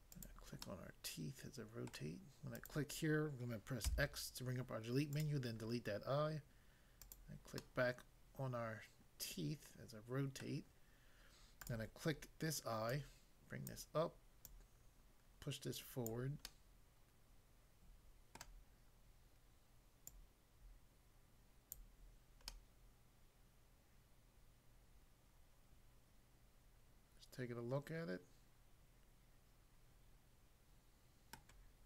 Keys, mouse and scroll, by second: 0.2 click, 0.6 middle click, 1.9 middle click, 2.5 click, 3.9 x, 5.1 click, 7.1 click, 7.6 middle click, 10.4 middle click, 11.6 click, 12.9 click, 13.6 click, 14.4 click, 16.1 click, 16.4 middle click, 18.4 middle click, 20.1 click, 21.8 click, 22.5 middle click, 31.4 middle click.